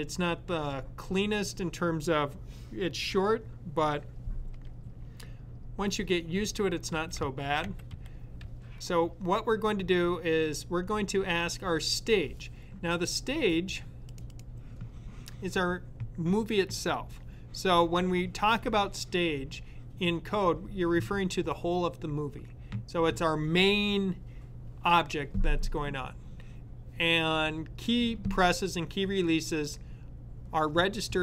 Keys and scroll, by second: 6.3-8.7 typing.